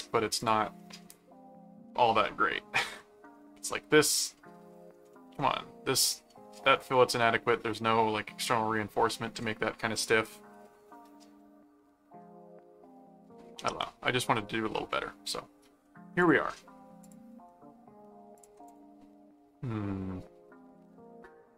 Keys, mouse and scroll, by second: 0.4 click, 0.7 middle click, 1.9 middle click, 2.9 middle click, 4.3 middle click, 5.1 middle click, 6.3 middle click, 7.2 middle click, 12.2-13.3 middle drag, 14.9 middle click, 15.8 middle click, 16.2 click, 17.0 click, 17.3 ctrl+Tab, 18.3 ctrl+click, 19.3-21.5 middle drag.